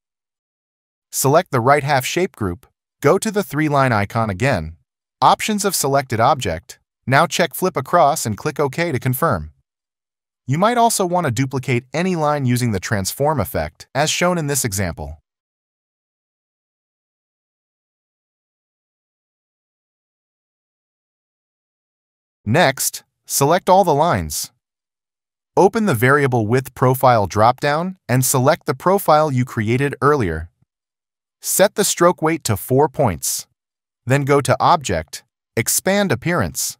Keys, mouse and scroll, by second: 8.5 click.